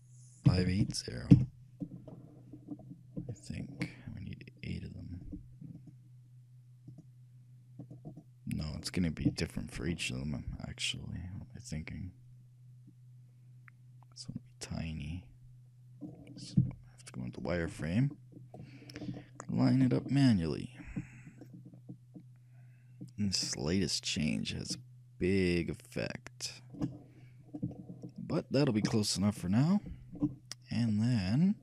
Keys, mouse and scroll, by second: 3.5-5.3 shift+middle drag, 5.3-10.5 shift+drag, 9.6-11.1 shift+middle drag, 11.1-13.0 shift+drag, 16.8 z, 17.8-21.4 middle drag, 21.4-23.4 shift+drag, 27.4-29.9 middle drag, 31.2-31.6 middle drag.